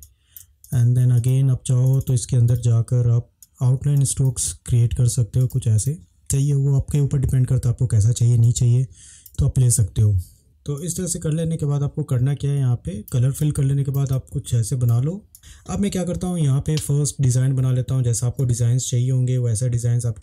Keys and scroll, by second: 8.5 space, 14.1 space.